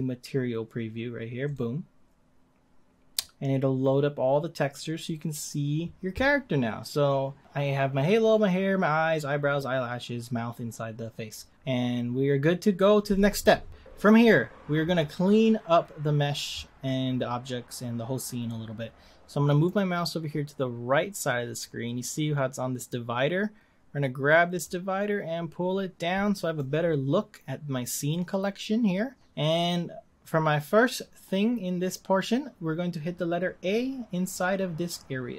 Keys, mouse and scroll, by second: 24.6-27.6 drag.